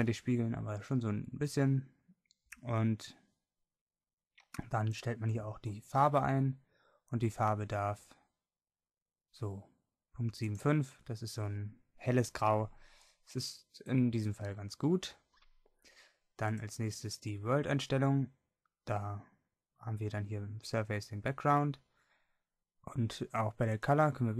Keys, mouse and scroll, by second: 5.0-6.8 drag, 10.6-12.3 drag, 13.0-15.4 drag, 16.5-21.2 drag, 23.8-24.3 drag.